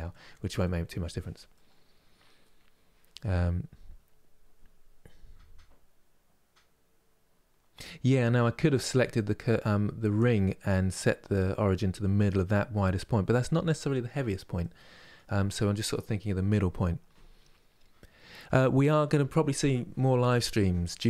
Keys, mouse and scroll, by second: 1.2-21.0 middle drag.